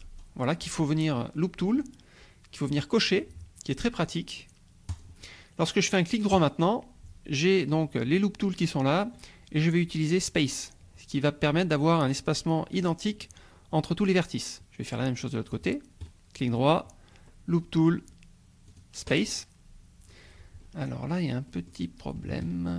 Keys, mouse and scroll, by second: 4.9 click, 6.3 right click, 10.4 click, 14.4-15.7 drag, 16.0 right click, 18.7 click, 20.7 scroll up 2, 21.5 click, 21.8 scroll up 2, 22.4 shift+click.